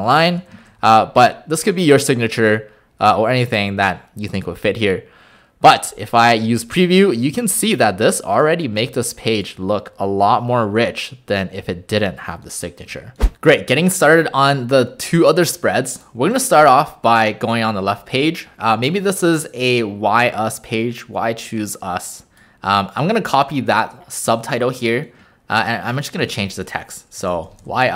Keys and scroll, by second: 6.2 w, 12.9 Delete, 16.2 w, 26.2 ctrl+a, 27.2-27.9 typing.